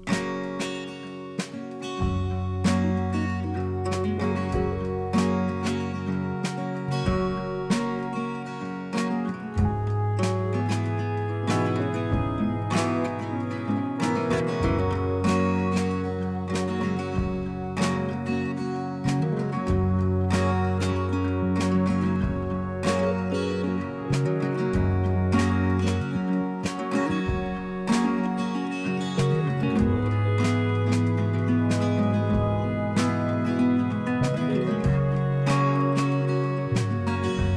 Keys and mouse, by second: 1.7 click, 3.8 click, 5.8 click, 7.8 click, 10.7 click, 12.3 click, 13.9 click, 15.8 click, 23.9 click, 26.8 click, 33.1 click, 34.8-36.6 drag, 36.7 click.